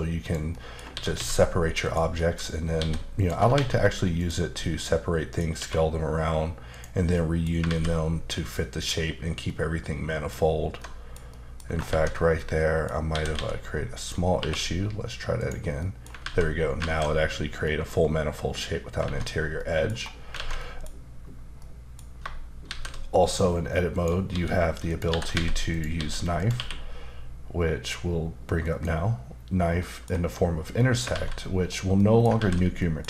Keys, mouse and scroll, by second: 0.2 click, 0.5 middle click, 0.9 typing, 1.8 click, 2.1 middle click, 2.5 scroll up 1, 2.8-3.5 typing, 3.1 click, 4.2 click, 4.5 middle click, 5.5 q, 6.7 click, 7.1 middle click, 7.7 alt+z, 8.5 middle click, 9.4 middle click, 10.8 alt+middle click, 11.6 scroll up 2, 11.9 ctrl+z, 12.3 middle click, 13.1 typing, 14.0 click, 14.4 q, 15.4 click, 15.8 middle click, 16.2 alt+z, 16.8 alt+z, 17.6 middle click, 19.0 alt+z, 19.3 scroll down 1, 19.9-20.2 scroll down 2, 20.4 alt+a, 20.6 middle click, 21.6 middle click, 22.6 shift+a, 23.9 click, 24.3-26.5 typing, 24.9 click, 25.7 click, 26.4 click, 28.6 click, 29.8 middle click, 30.8 middle click, 31.1 alt+z, 31.9 middle click, 32.4 alt+z, 32.8 middle click.